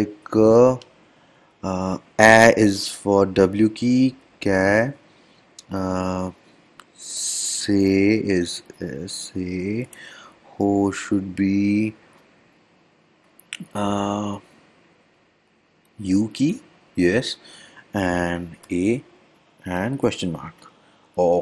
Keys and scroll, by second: 4.3 d, 7.2 m, 8.8 s, 16.6 u.